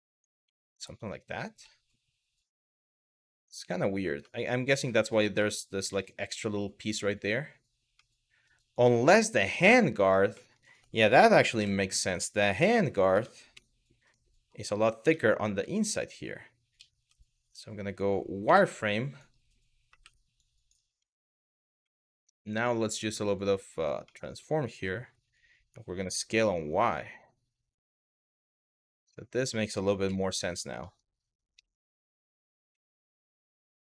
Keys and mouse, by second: 0.2-0.9 middle drag, 1.4-3.4 middle drag, 3.9-4.5 middle drag, 5.1 middle click, 5.6 middle drag, 7.7-8.1 middle drag, 8.3 click, 8.7-9.3 middle drag, 10.1 middle click, 11.2 KP_1, 12.3 Tab, 12.8 Tab, 13.2 KP_Divide, 13.8-14.1 middle drag, 14.6 Tab, 15.4 middle click, 16.4 z, 18.1 1, 19.6 w, 20.1 click, 20.7 middle click, 21.6 middle click, 23.0 click, 23.8 middle click, 25.6 s, 26.0 y, 28.0 click, 28.4 middle click, 29.7 KP_1, 30.5 middle click, 31.2 KP_Divide, 31.8 middle click, 32.4 z, 33.2-33.9 middle drag.